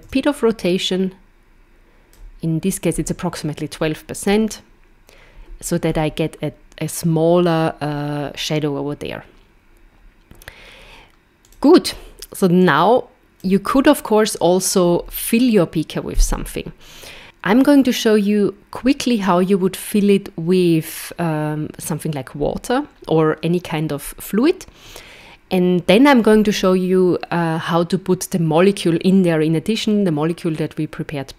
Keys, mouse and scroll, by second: 4.3 KP_0, 5.9 scroll up 4, 11.4 click, 12.7 click.